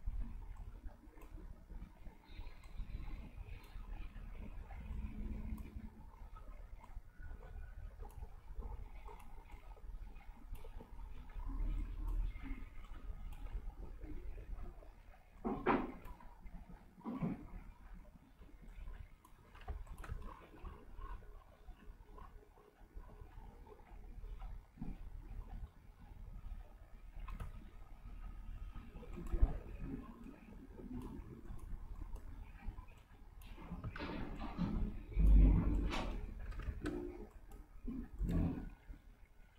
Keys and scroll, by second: 19.7 v, 34.1 ctrl+z, 36.7 ctrl+z.